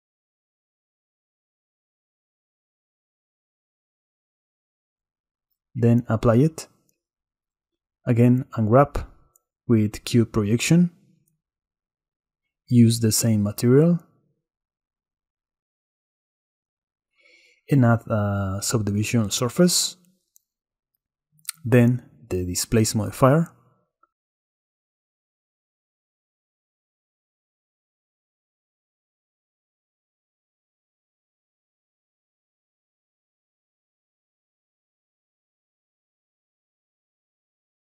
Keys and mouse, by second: 0.9-1.6 middle drag, 2.8 click, 3.2 shift+drag, 5.8-6.5 drag, 7.7 Tab, 8.0 a, 8.9 u, 10.2 Tab, 11.8-13.8 drag, 15.7-16.4 drag, 16.4 middle click, 23.9-25.5 middle drag, 27.3-33.3 drag.